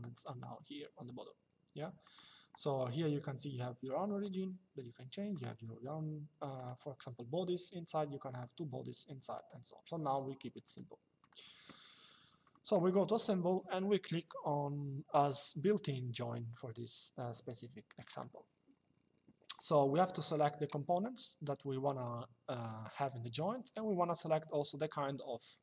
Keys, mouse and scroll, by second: 1.8 click, 4.0 click, 5.1 click, 6.3 click, 9.1 click, 10.3 click, 12.1 click, 17.8 click, 23.8 click.